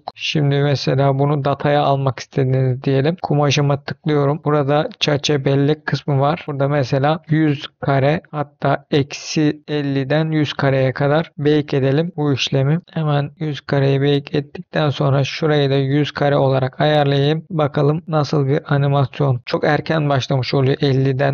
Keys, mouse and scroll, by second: 0.1 space, 0.1 click, 1.6-2.3 scroll down 5, 2.4-3.2 scroll up 2, 3.3 click, 4.0-4.9 scroll down 5, 4.9 click, 5.5-6.8 scroll down 1, 7.1-8.2 drag, 7.6 KP_0, 8.4-10.3 drag, 11.3-14.3 drag, 15.4-17.0 drag, 16.6 KP_0, 18.0 click, 18.0 space, 19.4 space.